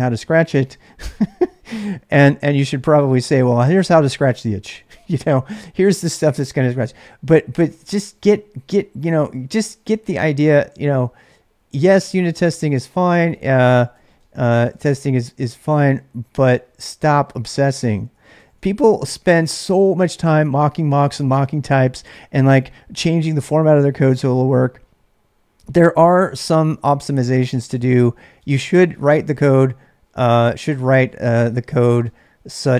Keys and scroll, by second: 8.7 typing, 9.9-19.1 typing, 26.0 o, 27.1 1, 27.9 Return, 28.4-32.7 typing.